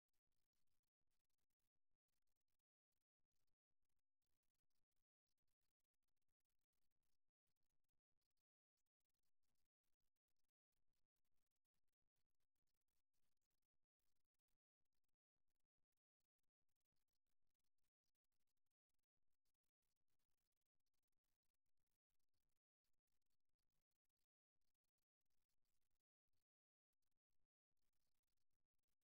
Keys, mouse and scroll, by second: 1.6 right click, 2.1 g, 2.8-5.6 right drag, 4.2 g, 5.8 right click, 6.2 g, 7.8-9.6 middle drag, 11.1-13.0 right drag, 11.8 g, 13.0-15.0 middle drag, 15.4-17.3 drag, 17.7-20.0 middle drag, 22.5 KP_3, 25.5 e.